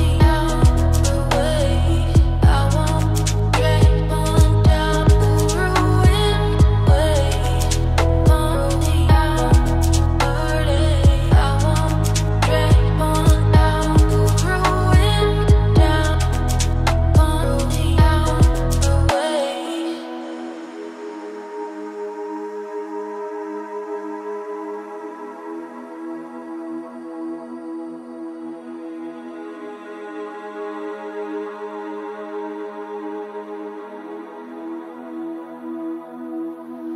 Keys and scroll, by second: 2.9 ctrl+shift+], 15.1 ctrl+z, 28.8 ctrl+space.